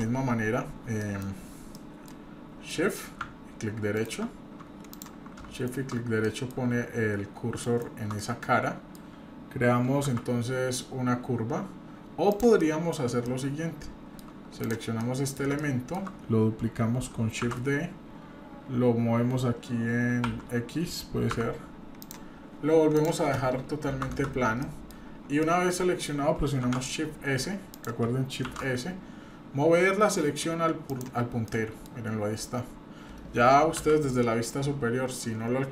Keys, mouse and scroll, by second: 1.0 middle drag, 1.3-1.7 scroll down 3, 1.8 middle click, 2.2-2.5 scroll up 2, 2.7 middle click, 3.9-5.1 right drag, 5.6 shift+right click, 6.2 middle click, 7.6 shift+right click, 8.2 middle click, 10.1 shift+a, 12.3 click, 12.6-12.9 middle drag, 12.9-13.3 scroll down 2, 13.3-14.3 shift+middle drag, 14.6 click, 15.0-15.4 middle drag, 15.6-16.0 shift+middle drag, 17.4 shift+d, 22.3-22.8 scroll up 1, 23.0-24.2 drag, 24.6 middle drag, 25.0-25.4 scroll up 2, 25.4-26.1 middle drag, 26.6 shift+a, 28.4 shift+s, 31.4-31.9 middle drag, 32.0-32.8 scroll up 4, 33.8 KP_7, 34.2-35.1 scroll down 4, 35.0-35.6 scroll up 3.